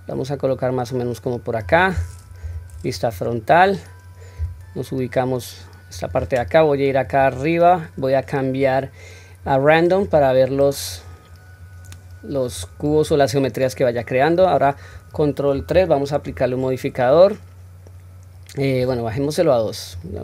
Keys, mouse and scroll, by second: 2.4 KP_1, 3.1-4.3 scroll up 1, 4.3 scroll up 1, 4.3 g, 7.1-10.7 drag, 15.6 ctrl+3, 19.9 click.